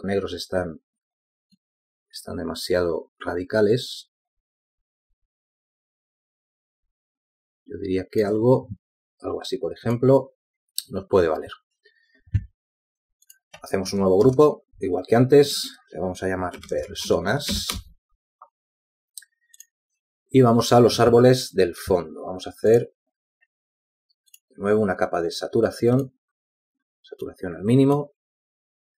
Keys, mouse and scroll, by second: 15.9 shift+click, 16.9 ctrl+g, 19.2-20.2 typing, 20.4 Return.